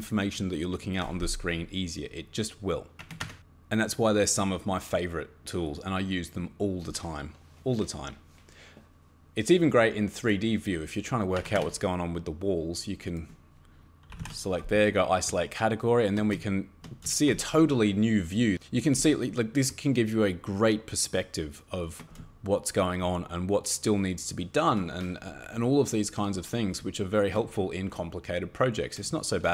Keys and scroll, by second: 3.0 Escape, 3.2 Escape, 11.4 Escape, 11.5 Escape, 13.9-14.7 typing.